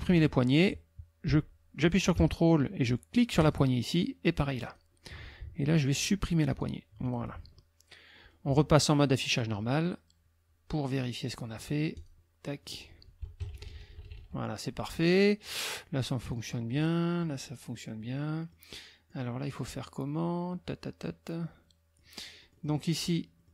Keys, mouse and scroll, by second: 0.1 ctrl+z, 3.4 ctrl+click, 4.6 ctrl+click, 6.5 ctrl+click, 7.0 ctrl+click, 9.3 click, 12.0 click, 12.6 click, 13.4 KP_Subtract, 15.9 click, 16.8 click, 18.0 click, 18.8 click, 21.1-22.2 drag, 22.4 click, 23.4-23.5 drag.